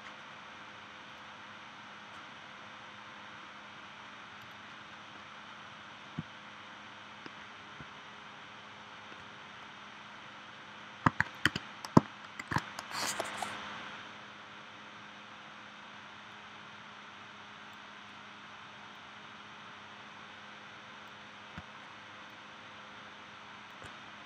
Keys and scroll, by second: 12.4 shift+w.